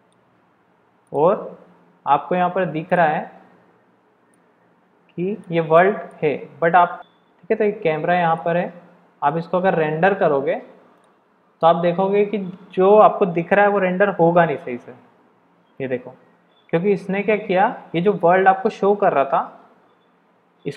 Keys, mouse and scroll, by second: 1.1-6.3 drag, 7.0 KP_0, 8.4-9.1 shift+drag, 9.1 shift+middle click, 9.2 shift+drag, 10.9-12.6 drag.